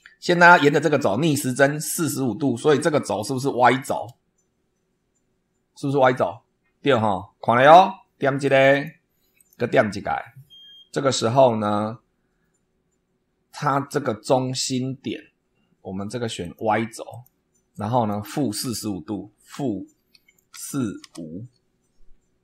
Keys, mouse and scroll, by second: 8.6 click, 9.3 click, 16.4 click, 17.0 click, 17.7 click, 19.4 -, 20.4 4, 21.0 5.